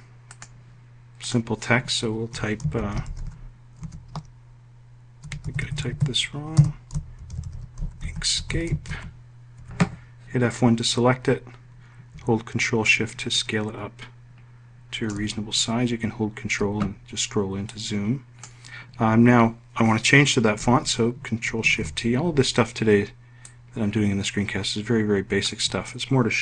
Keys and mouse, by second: 1.9-3.2 typing, 4.8 BackSpace, 6.0-8.7 typing, 9.0 F1, 12.3-14.6 ctrl+shift+drag, 17.1 click, 21.0 ctrl+shift+t.